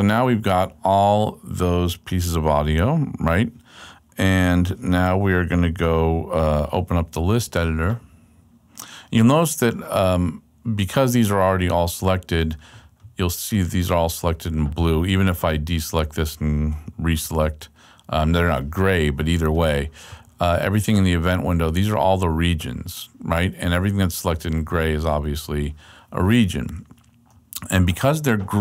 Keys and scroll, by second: 7.8 d, 17.2 super+a.